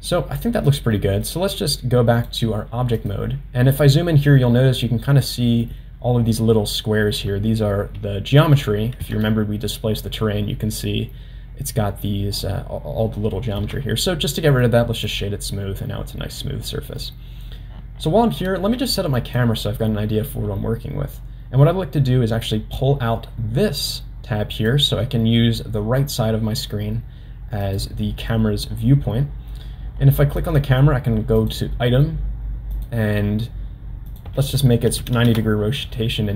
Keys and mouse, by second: 0.1 click, 1.0 middle click, 2.2 click, 5.3 middle click, 9.0 Tab, 13.6 Tab, 14.6 right click, 16.7-17.0 middle drag, 19.3 click, 22.5-24.7 drag, 26.0 click, 27.6 click, 30.4 click, 31.4 click, 32.7 click, 34.2 click.